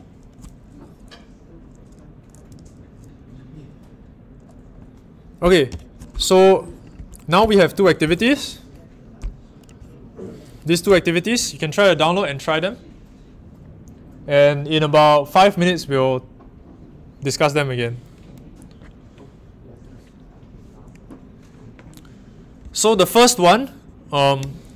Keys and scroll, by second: 7.4 Down.